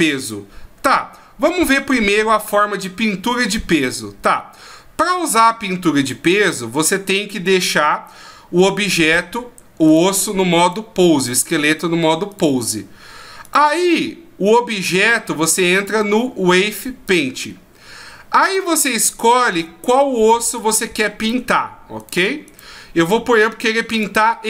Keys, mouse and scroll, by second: 9.9 right click, 10.6 right click, 11.2 right click, 11.7 right click, 12.3 right click, 13.4 right click, 15.7 click, 18.4 right click, 19.2 right click, 20.5 right click, 21.2 right click, 22.0 right click, 22.4 right click, 23.9 right click.